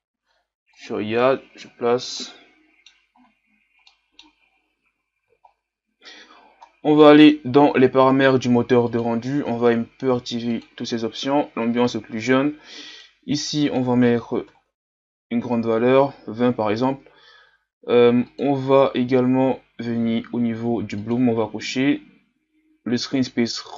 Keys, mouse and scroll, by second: 1.8-2.2 scroll down 2, 2.2 middle click, 3.1-3.9 scroll up 3, 3.9 middle click, 4.5-5.5 scroll up 2, 5.5-6.1 scroll down 3, 6.1-7.0 scroll down 1, 7.0-10.6 middle drag, 10.6-23.7 drag.